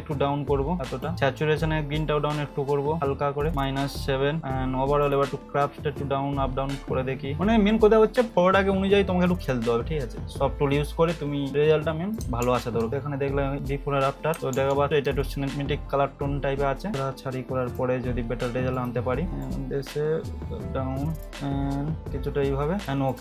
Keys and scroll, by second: 12.4 ctrl+-, 14.4 ctrl+=, 14.5 ctrl+-.